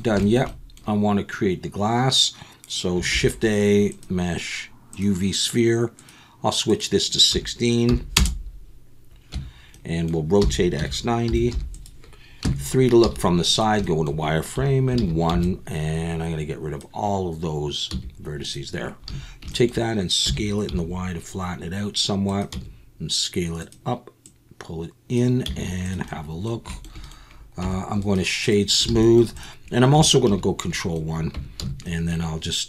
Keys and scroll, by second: 3.1 shift+a, 9.3 Tab, 10.4-13.0 typing, 14.1 KP_3, 14.6 1, 15.0 alt+a, 15.3 b, 17.9 x, 19.1 a, 19.7 x, 20.3 s, 20.7 y, 22.5 s, 25.4 z, 27.6 Tab, 28.9 alt+a, 30.3 ctrl+1, 31.3 Tab, 31.6 s.